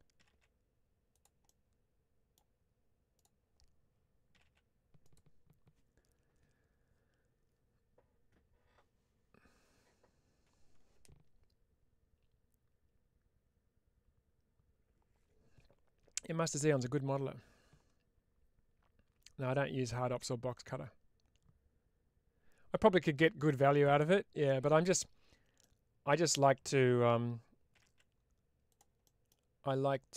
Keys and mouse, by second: 1.0 click, 1.4 middle click, 3.0 click, 4.9 click, 25.6 middle click, 28.6 click, 29.0 middle click, 30.0 click.